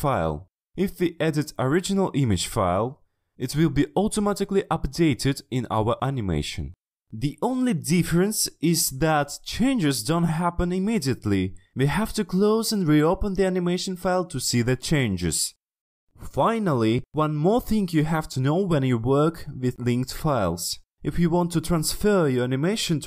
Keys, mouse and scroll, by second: 0.0 click, 0.1 click, 0.8 click, 1.2 click, 1.6 click, 2.2 click, 5.7 click, 6.8 click, 8.5 click, 11.5-23.0 drag.